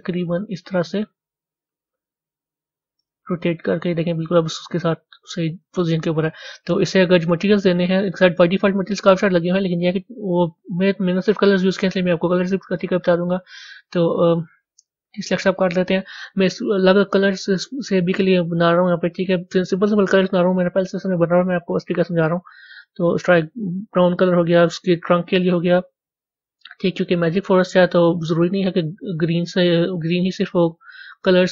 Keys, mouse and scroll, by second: 3.6-5.0 middle drag, 5.0 Tab, 5.4-8.0 middle drag, 8.0 click.